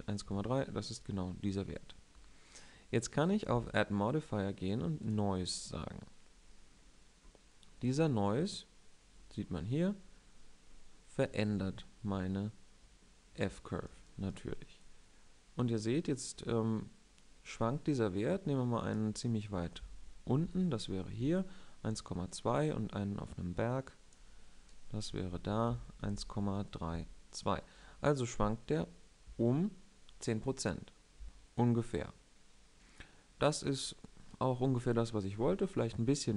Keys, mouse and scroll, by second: 3.3-4.8 drag, 19.5 Right, 20.1 Left, 24.8 Right, 25.0 Right, 25.4 Left, 25.7 Left.